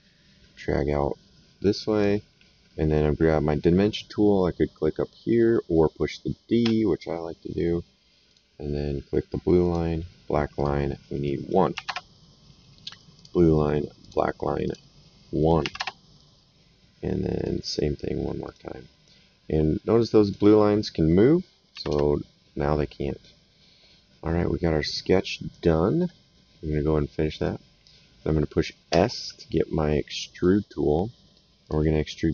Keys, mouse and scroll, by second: 1.9 click, 6.6 d, 8.2 click, 9.6 click, 11.7 KP_1, 11.9 Return, 13.1 click, 15.6 KP_1, 15.7 KP_Enter, 17.3 click, 18.4 click, 20.2 click, 21.7 KP_1, 21.9 KP_Enter, 21.9 Return, 24.3 right click, 27.3 click, 28.9 s, 30.3 click, 31.6 click.